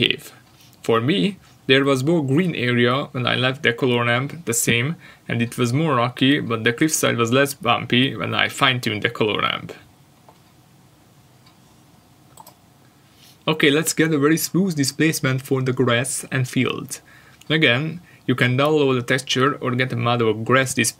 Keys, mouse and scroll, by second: 4.5 click, 4.6 Return, 6.3 scroll down 1, 6.9-7.5 scroll down 1, 7.5-8.4 scroll down 1, 9.7 ctrl+shift+click, 13.2 click, 13.3 Return, 14.4 scroll up 1, 16.1 ctrl+shift+click, 16.5 scroll down 1, 16.7 middle click, 20.0 click.